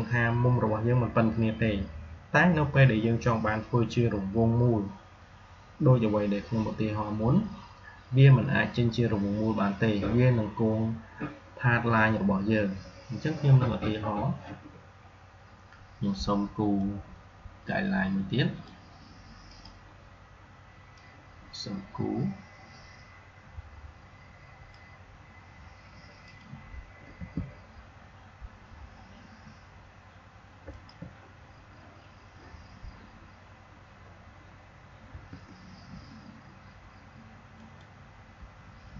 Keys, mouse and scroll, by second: 16.7-26.1 drag, 27.0 r, 30.9 click, 34.9 r, 37.5 alt+click.